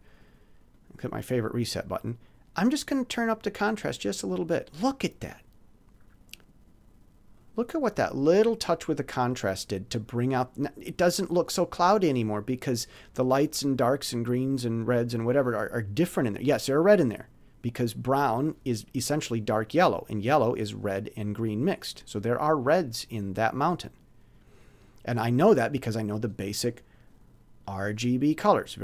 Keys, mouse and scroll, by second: 0.7 click, 3.8 click, 6.3 click, 7.3-8.4 drag, 27.7-28.8 drag.